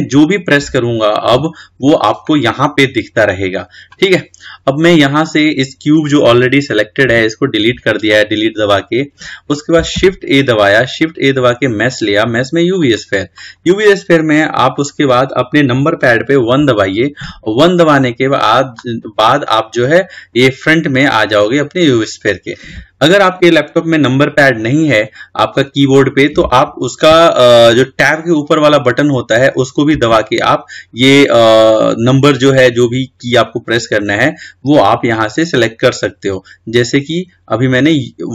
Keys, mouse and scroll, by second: 5.0 click, 7.3 Delete, 10.2 shift+a, 16.8 KP_1, 21.2-22.3 scroll up 7, 30.2 `.